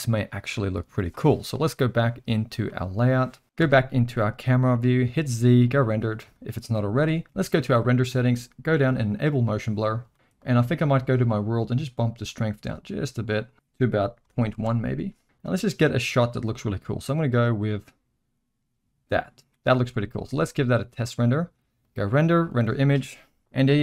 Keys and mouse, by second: 2.5 click, 3.6 KP_0, 5.1 z, 6.3 shift+middle drag, 7.9 click, 9.0 click, 10.1 shift+middle click, 12.3 click, 12.7 click, 13.5-15.1 drag, 15.2-19.6 drag, 20.1 shift+middle drag, 20.4 z, 21.8-23.8 drag.